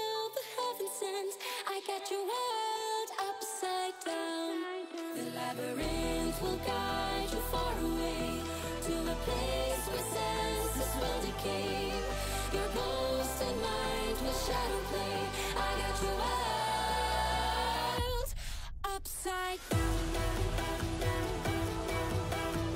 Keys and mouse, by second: 0.0 click, 0.9 i, 3.1-7.0 drag, 8.7 r, 11.8 click, 13.0 click, 14.7 i, 15.8 click, 16.2 space, 17.0 space, 17.8-18.7 drag, 19.7 s, 21.7 i, 22.3 space.